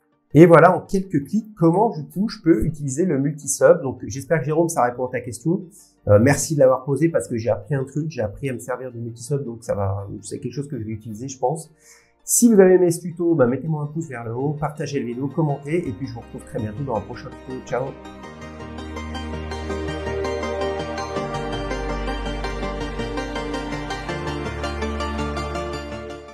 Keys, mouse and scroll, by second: 0.7 scroll down 1, 1.4 shift+middle click, 1.4 scroll down 4, 3.4 shift+scroll down 1, 5.3 shift+scroll down 1, 5.9 scroll, 6.2 scroll down 4, 6.3 shift+scroll.